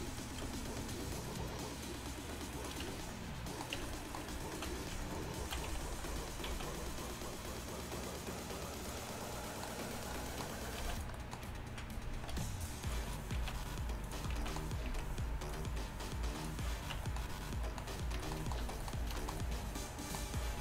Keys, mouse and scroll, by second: 2.5 click, 2.9 Tab, 3.8 Tab, 5.7 z, 6.5 z, 10.8 z, 11.0-14.2 right drag, 12.4 c, 13.4 z, 14.1 click, 14.4 z, 14.9 z, 17.0 Tab, 18.7 a.